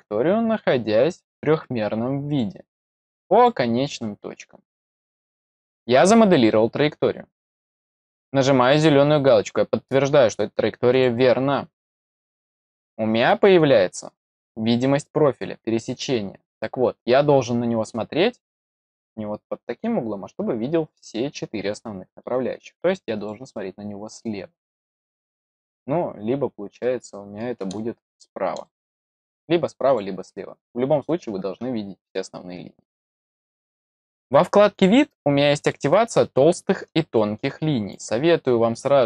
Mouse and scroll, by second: 1.1 click, 2.2 click, 3.3 click, 4.7 click, 10.8 click, 12.5-13.4 middle drag, 13.7 scroll up 2, 14.6-22.2 middle drag, 23.1 click, 26.7 middle click, 27.7-28.2 middle drag, 28.6-29.1 middle drag, 29.8 click, 34.7 click, 35.5 click, 36.5-36.9 scroll down 4, 37.1-37.8 middle drag, 38.4-39.0 scroll down 10.